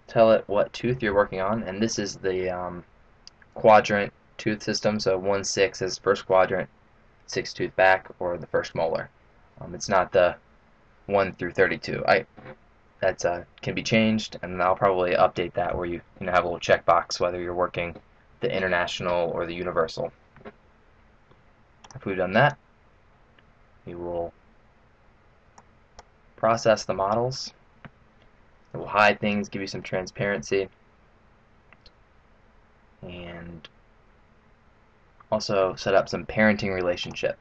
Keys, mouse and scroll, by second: 25.7 click, 37.0 click.